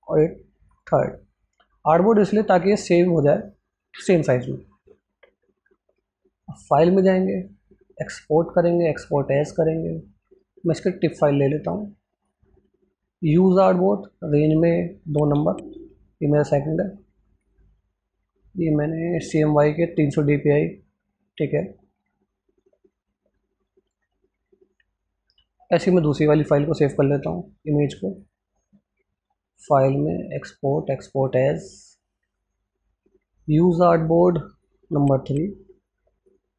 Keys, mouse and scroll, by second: 17.2 Tab, 17.2 click, 36.1 click.